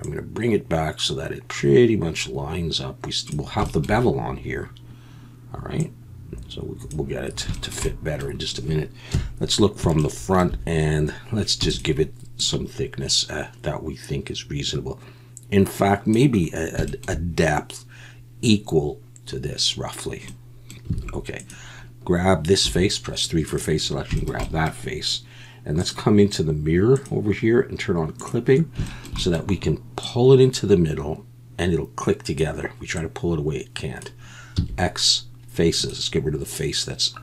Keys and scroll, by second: 9.1 KP_1, 11.6 e, 20.9 alt+a, 22.6 3, 34.6 x.